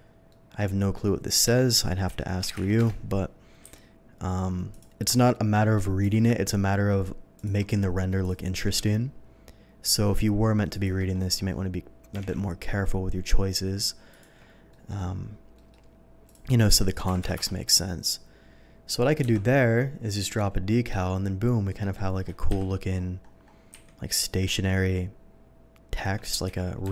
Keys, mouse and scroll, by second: 0.3 middle drag, 2.2 r, 2.4 1, 2.6 0, 2.8 Return, 3.6 s, 4.7 click, 6.0 g, 7.4 click, 7.8 s, 8.2 click, 8.7 g, 9.1 g, 10.7 click, 11.4 middle click, 12.1 g, 12.8 g, 14.1 click, 14.7 ctrl+middle click, 15.6 middle click, 16.3 click, 16.6 click, 17.2 2, 18.2 middle click, 19.6 KP_0, 21.8 middle drag, 23.0 7, 23.7 s, 24.2 click, 24.4 g, 25.9 click, 26.4 v.